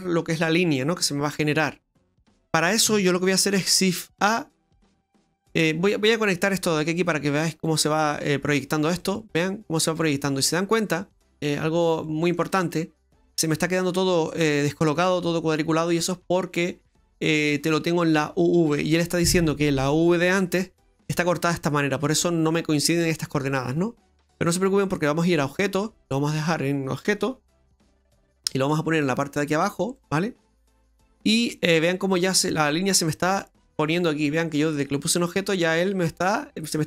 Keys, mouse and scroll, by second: 4.2 shift+a, 6.9 click, 9.0 middle click, 9.9 middle click, 12.0 middle click, 12.7 middle click, 14.9 middle click, 16.0 middle click, 17.3 middle click, 20.9 middle click, 25.2 click, 29.7 click, 31.8 middle click, 36.2 middle click.